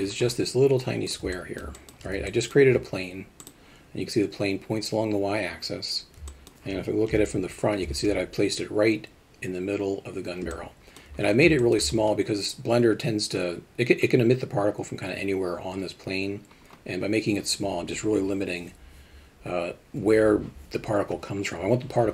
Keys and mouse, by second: 1.3-1.9 alt+shift+middle drag, 2.3 alt+middle drag, 3.4 click, 6.3 alt+middle drag, 7.1 ctrl+KP_1, 10.5-11.1 alt+middle drag, 11.6 alt+shift+middle drag.